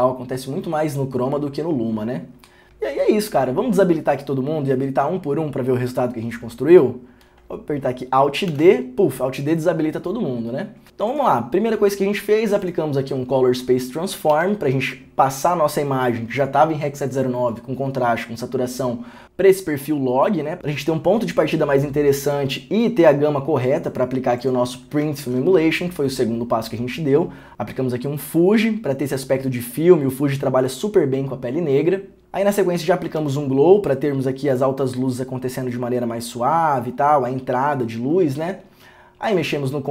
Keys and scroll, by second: 25.4 ctrl+d, 32.2 ctrl+d, 33.4 ctrl+d.